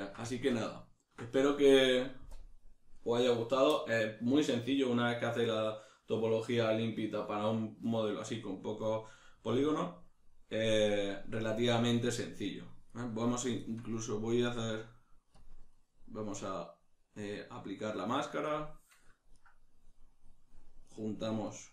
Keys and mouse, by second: 10.9 right click, 12.5 right click, 15.4 click, 19.3 right click, 20.9 right click, 21.5 shift+right click.